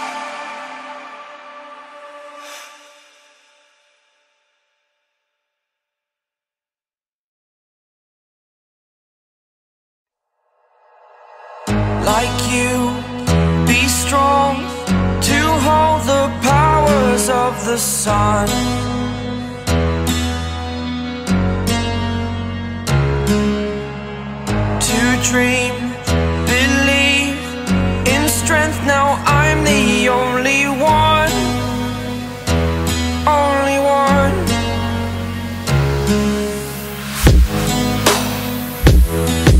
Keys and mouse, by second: 3.9 right click, 4.9 click, 12.6 ], 12.7 ], 13.9 click, 15.7 click, 16.5 right click, 17.1 click, 22.1 click, 22.1 typing, 23.7 ], 23.9 ], 24.3 right click, 25.6-27.9 drag, 28.1-30.4 drag.